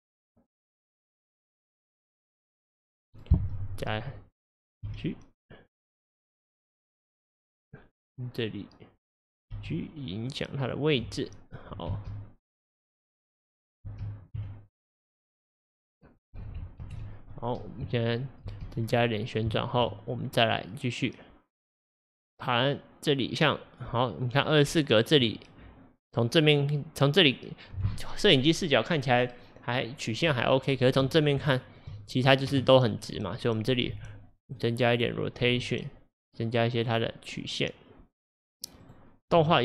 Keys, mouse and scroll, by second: 0.3 click, 1.7 click, 2.6 click, 3.4 w, 4.9 g, 9.7 g, 12.0 space, 13.9 space, 14.4 a, 16.9 ctrl+alt+F11, 18.5 space, 18.9 scroll down 1, 20.6-23.7 drag, 25.6 scroll up 1, 31.6-32.1 shift+middle drag, 32.1-32.8 scroll up 1, 34.0 r, 34.9 click, 35.5 r, 38.9 click, 39.4 r.